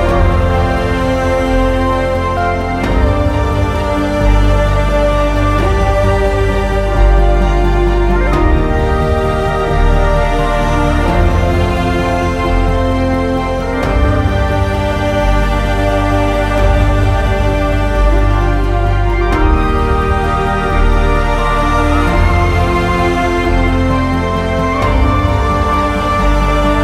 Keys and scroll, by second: 3.6 alt+x, 5.7 w, 9.3 w, 24.0 alt+x.